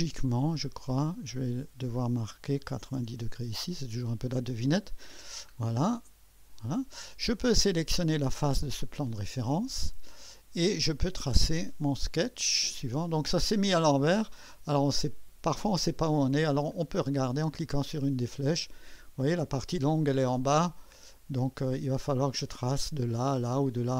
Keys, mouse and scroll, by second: 2.6 shift+9, 2.9 0, 3.2 Return, 5.8 click, 8.2 click, 11.6 click, 16.7 click, 17.9 click, 18.7 click, 20.9 click.